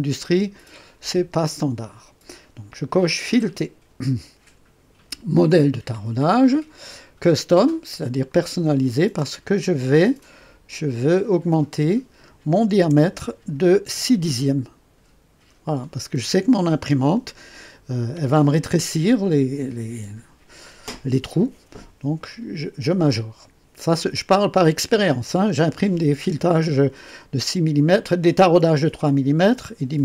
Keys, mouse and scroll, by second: 0.5 click, 3.3 click, 5.7 click, 8.2 click, 10.1 click, 11.2 click, 12.7 BackSpace.